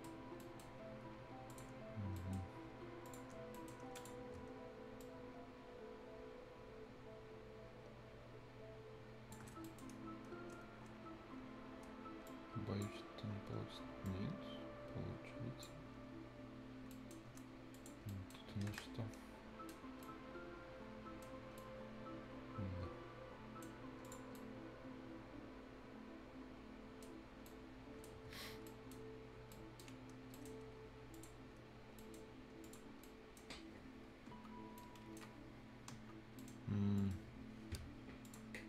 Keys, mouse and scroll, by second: 0.2 scroll up 1, 0.4 right click, 0.7 scroll down 1, 1.5 click, 1.7 scroll down 1, 2.0-2.7 scroll up 2, 2.2 right click, 3.1 click, 3.4 scroll down 1, 3.5 right click, 4.0 click, 4.0 click, 5.0-9.6 ctrl+shift+drag, 9.6-11.8 shift+scroll up 2, 9.6 shift+right click, 12.3-14.1 shift+drag, 14.1-16.9 shift+drag, 16.9 right click, 17.7 shift+click, 18.1 shift+right click, 18.5 scroll up 1, 18.7 Escape, 18.8 shift+right click, 19.8 shift+scroll up 1, 20.0-21.3 shift+right drag, 21.3 shift+scroll up 1, 21.6-24.0 shift+right drag, 24.0 shift+click, 24.4-27.1 shift+right drag, 27.1 shift+scroll down 1, 27.3 shift+scroll up 1, 27.5 shift+right click, 28.7 right click, 29.0 scroll down 1, 29.5 right click, 29.5 right click, 29.9 scroll down 1, 30.1 scroll up 1, 30.3 right click, 31.1 click, 31.4 scroll down 1, 32.0 right click, 32.3-32.6 scroll down 1, 32.6 click, 32.9 scroll up 1, 33.0 right click, 34.3 F10, 34.6 scroll up 1, 34.8 right click, 35.9 F10, 36.4 right click, 37.0 middle click, 38.2 click.